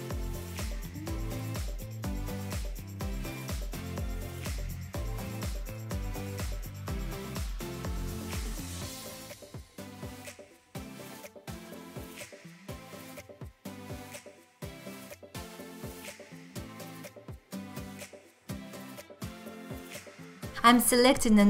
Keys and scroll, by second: 1.1 alt+z, 3.9 alt+z, 6.8 x, 8.1 q, 8.6 x, 9.8 ctrl+z, 10.2 1, 11.7 g, 12.2 g, 12.9 g, 13.8 g, 15.5 g, 19.3 ctrl+z, 20.4 shift+x.